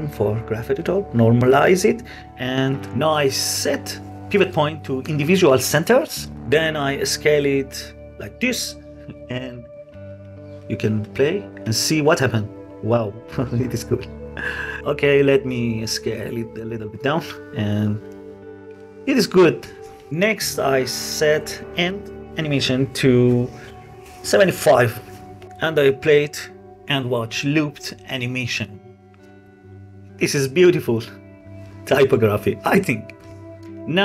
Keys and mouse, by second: 0.8 click, 1.6 middle click, 2.0 click, 4.1-5.9 drag, 6.4 s, 9.5-10.2 drag, 10.3 space, 12.0 space, 12.3-12.7 drag, 12.7 space, 13.9 space, 14.9 s, 15.2 x, 17.2-17.6 drag, 17.8 space, 19.2 space, 20.6 click, 22.1-24.7 drag, 25.4 ctrl+z, 25.8 space, 29.0 click, 33.6 space.